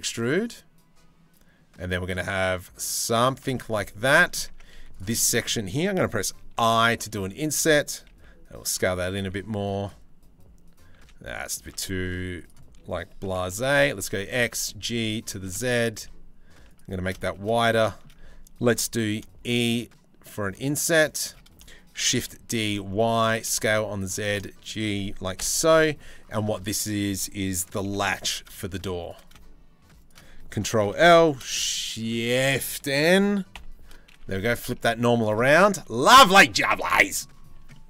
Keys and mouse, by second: 3.6 Tab, 4.1 Tab, 4.3 3, 6.1 i, 7.7 s, 8.6 s, 10.6 s, 11.2 s, 12.8 g, 14.1 g, 15.0 middle click, 15.3 s, 16.8 shift+middle click, 17.1 middle click, 17.5 middle click, 18.7 e, 21.6 shift+d, 22.9 s, 23.6 g, 25.0 KP_Decimal, 27.4 g, 28.8 e, 30.4 ctrl+l, 33.1 shift+n, 33.9 g, 35.3 z, 37.2 Tab.